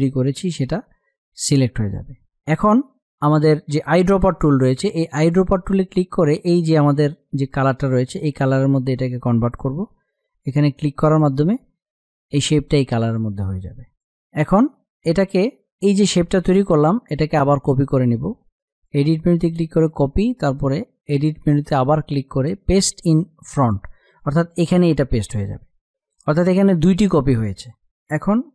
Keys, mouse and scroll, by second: 5.2 click, 11.0 click, 18.7 click.